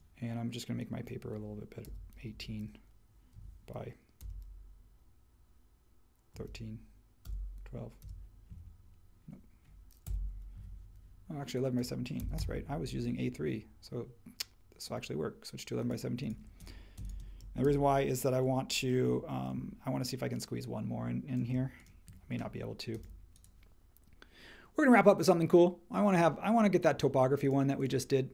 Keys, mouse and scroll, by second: 1.8-2.3 typing, 3.3 Tab, 4.2 typing, 6.3 3, 7.2 BackSpace, 8.0 2, 10.0 BackSpace, 10.6 1, 11.9-12.8 typing, 17.6 super+c.